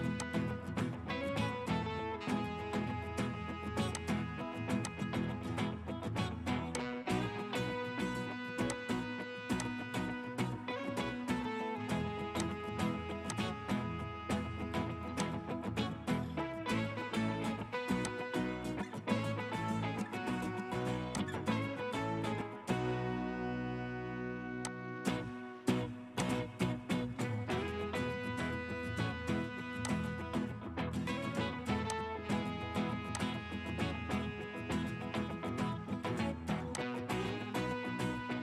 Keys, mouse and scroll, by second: 1.4 Escape, 1.7 Escape, 35.2 Escape, 35.6-36.8 scroll down 1.